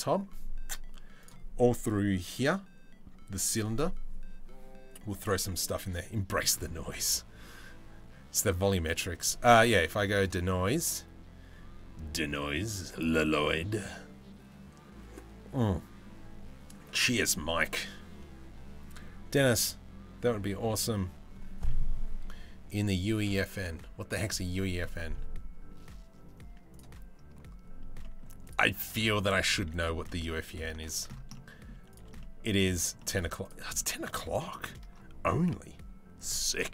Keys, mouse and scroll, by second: 9.8 click, 27.6 middle click, 28.3 Tab, 29.2 3, 29.7 middle click, 30.5 shift+middle click, 31.0 middle click, 31.8 middle click, 32.6 shift+middle click, 33.4 middle click, 34.1 shift+middle click.